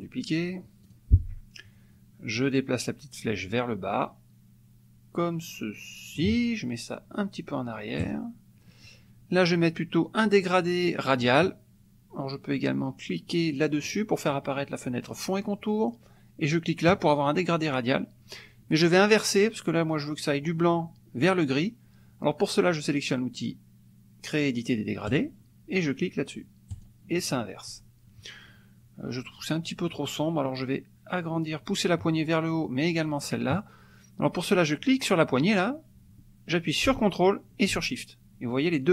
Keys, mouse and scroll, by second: 0.9 click, 2.4-6.3 drag, 8.0 click, 16.9 click, 25.1 click, 26.7 click, 35.4-38.9 drag.